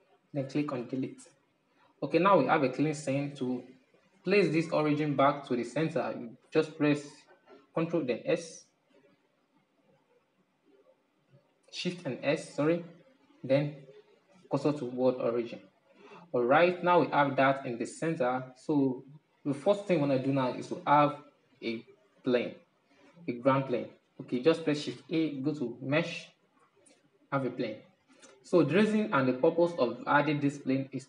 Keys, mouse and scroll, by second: 1.8-5.0 middle drag, 8.3 ctrl+s, 10.1 ctrl+s, 12.2 shift+s, 16.7-19.6 middle drag, 20.5-23.6 middle drag, 27.5 shift+a, 28.9-31.0 middle drag.